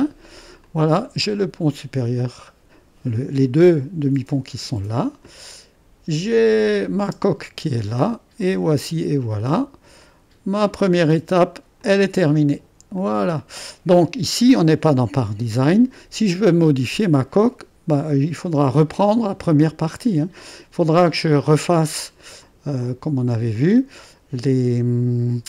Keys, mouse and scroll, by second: 5.4-6.5 middle drag, 6.5 click, 7.0 space, 7.9-10.0 drag, 10.7 middle click, 11.8 click, 13.0-15.1 drag, 18.7-21.1 scroll up 1, 21.1-24.2 drag.